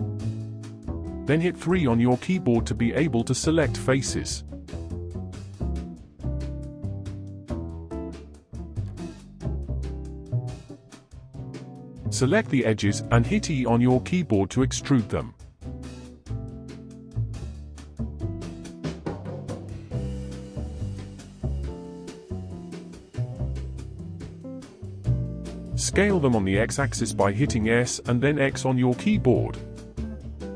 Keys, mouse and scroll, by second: 0.0-6.1 shift+middle drag, 6.1 click, 8.1 shift+click, 8.9 x, 10.7 2, 11.3 click, 12.4 shift+click, 14.3 e, 23.2 KP_1, 24.3 shift+middle click, 25.2 alt+z, 28.2 s.